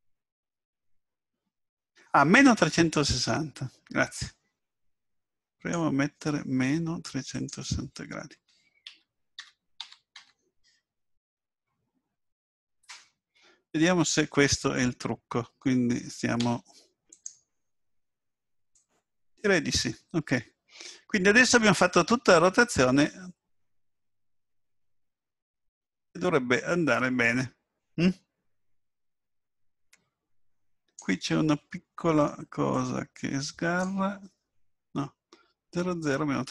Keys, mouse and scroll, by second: 7.3 click, 16.4 i, 18.7 click, 32.7 click.